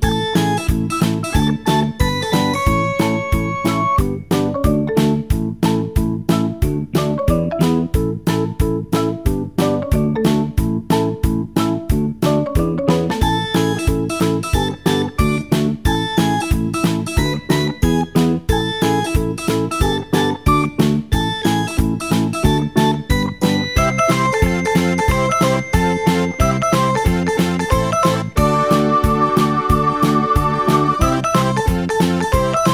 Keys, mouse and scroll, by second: 0.1-3.9 scroll down 1, 3.9-4.9 drag, 4.9-5.5 scroll down 1, 5.5-10.2 scroll down 1, 10.2 click, 13.7-18.6 drag, 21.5-24.5 drag, 27.7-30.9 drag.